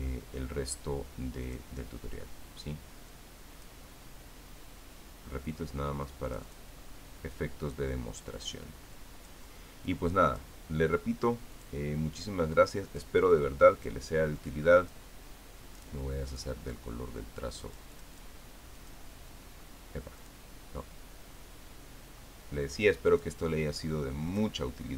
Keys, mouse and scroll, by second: 2.2 click, 3.9 click, 7.1 click, 9.2 click, 9.8 click, 10.7 click, 12.4 click, 13.7 click, 14.1 click, 15.2 click, 17.1 click, 18.5 click, 19.6 click, 21.0 click, 23.6 click.